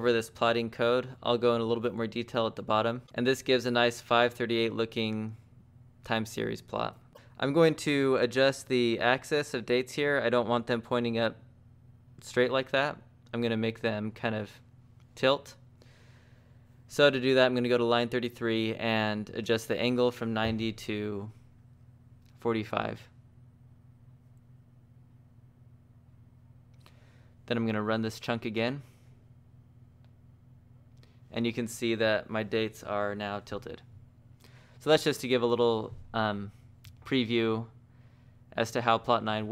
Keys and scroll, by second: 1.1 shift+v, 2.8-3.6 typing, 17.6 Escape, 20.2-26.6 typing, 29.1-29.9 typing.